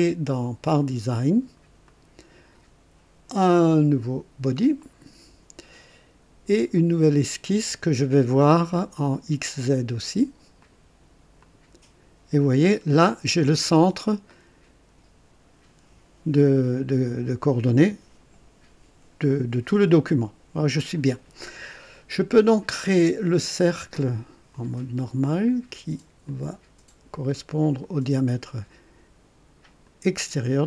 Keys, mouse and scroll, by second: 2.0 click, 4.8 click, 6.7 click, 10.6 click, 11.4 click, 12.5 scroll up 1, 13.1 right click, 14.3-14.9 right drag, 24.5 click, 26.2 click, 27.8 click, 29.8 click.